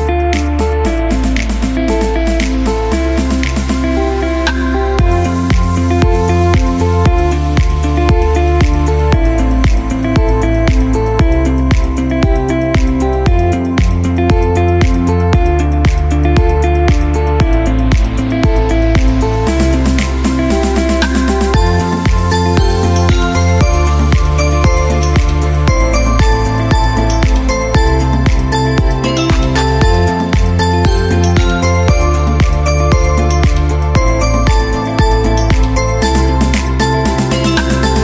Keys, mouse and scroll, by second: 1.0-4.2 drag, 4.4 click, 7.2 click, 9.8 scroll down 1, 12.1 click, 14.7 click, 16.9-19.7 typing, 21.7-26.7 drag, 34.1-38.0 drag.